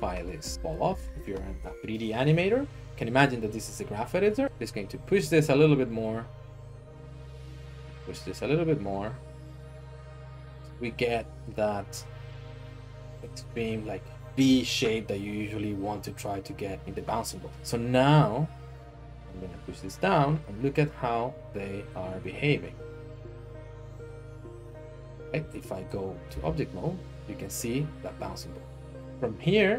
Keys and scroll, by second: 25.9 Tab.